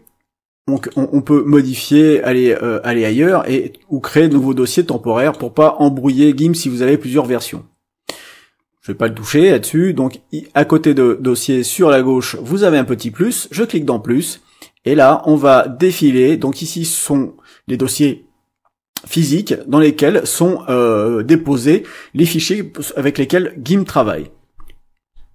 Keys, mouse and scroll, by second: 0.7 click, 3.1 click, 4.0 click, 5.1 click, 13.4 click.